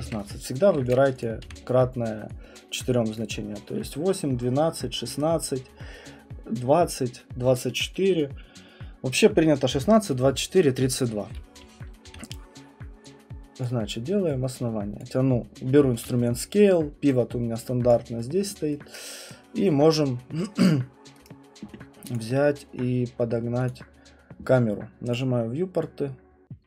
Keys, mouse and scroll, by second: 0.0-1.9 typing, 0.9 click, 1.2 click, 3.2 click, 12.0 r, 13.6 click, 15.0 click, 17.9 alt+click, 19.3 right click, 21.2 right click, 22.2 click, 23.7 click, 25.1 click.